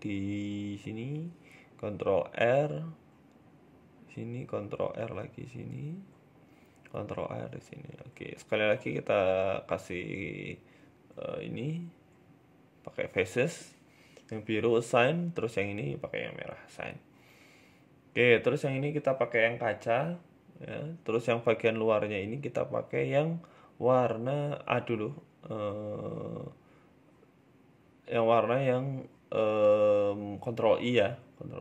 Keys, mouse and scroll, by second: 1.2 ctrl+r, 3.6 ctrl+r, 6.0 ctrl+r, 7.8 middle click, 8.6 shift+middle click, 9.2 right click, 9.8 right click, 9.9 alt+shift+right click, 9.9 alt+shift+right click, 11.2 alt+shift+Right, 12.0 click, 12.6 alt+shift+Right, 13.3 click, 13.9 click, 14.4 right click, 14.7 alt+shift+Right, 15.6 click, 15.9 click, 16.2 Tab, 16.2 scroll down 3, 16.5 middle click, 16.9 shift+middle click, 17.1 scroll up 3, 17.4 right click, 18.0 click, 20.1 middle click, 20.5 middle click, 20.8 Tab, 21.0 middle click, 21.3 scroll up 2, 21.5 middle click, 22.2 middle click, 23.3 middle click, 23.9 right click, 24.3 middle click, 25.1 right click, 25.7 shift+right click, 26.0 shift+middle click, 26.7 shift+right click, 29.9 ctrl+i, 31.0 click, 31.5 click.